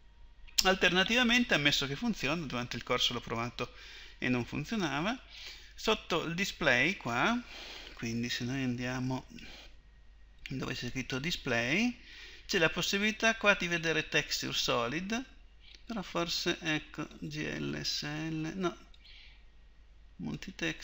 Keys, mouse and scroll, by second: 0.0 Escape, 9.4-20.8 drag.